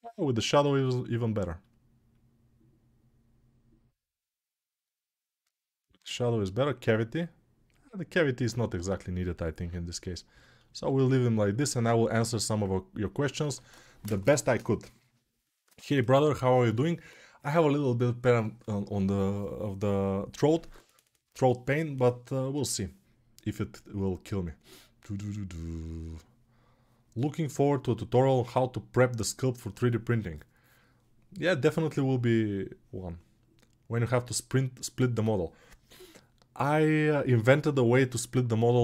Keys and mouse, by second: 10.0-38.8 alt+middle drag.